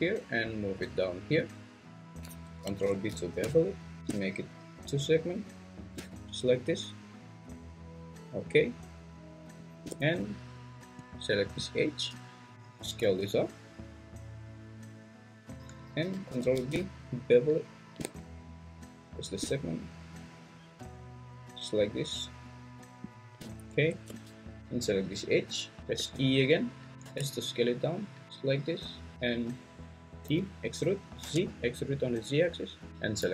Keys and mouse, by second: 1.4 click, 2.8 ctrl+b, 12.5 ctrl+z, 12.8 s, 16.3 ctrl+b, 24.1 Tab, 26.0 e, 27.0 s, 28.9 click, 30.3 e, 31.2 z.